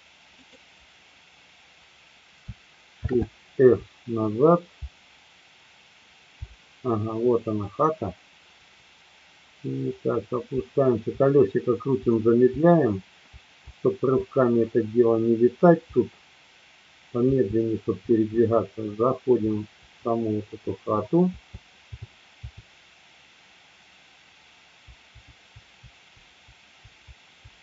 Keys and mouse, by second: 0.3 click, 3.1 shift+f, 4.3 Down, 4.8-6.1 Left, 8.7-10.2 Up, 11.5-17.2 Up, 17.2 Left, 18.3 Up, 18.9 Up, 19.2 Up, 19.3 Up, 19.7 Up, 21.3 Left, 21.8 Left, 22.6 Left, 24.8 Up, 25.3 Up, 26.6 Up, 26.8 Up.